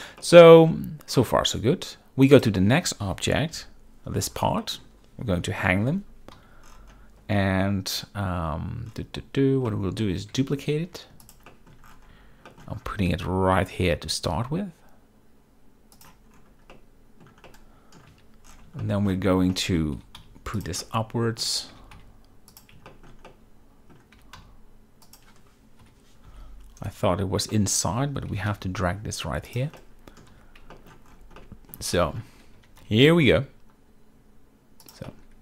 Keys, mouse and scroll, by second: 0.3-1.5 middle drag, 2.4 click, 3.6 KP_Decimal, 4.7 middle click, 5.5 KP_7, 6.5 z, 9.8 shift+middle drag, 10.4 shift+d, 11.3 shift+click, 11.6 shift+middle click, 12.6 shift+middle drag, 13.2 g, 16.0 shift+click, 16.8-17.3 middle drag, 17.6-18.1 middle drag, 17.7-18.1 scroll, 18.2 z, 18.9 shift+middle drag, 19.6 middle drag, 20.1 g, 20.3 z, 20.7 click, 20.9-21.5 shift+middle drag, 21.8 g, 22.1 z, 23.0 shift+middle drag, 23.4-24.0 middle drag, 24.3 g, 24.5 z, 25.2 click, 25.9 KP_7, 26.4 z, 27.6-28.0 shift+middle drag, 28.4 g, 28.6 y, 29.9-30.3 middle drag, 30.3 scroll, 30.4 z, 30.8 shift+middle drag, 31.5-31.8 middle drag, 32.1 shift+middle drag, 32.7 g, 32.9 z, 34.9 click, 35.2-35.4 middle drag.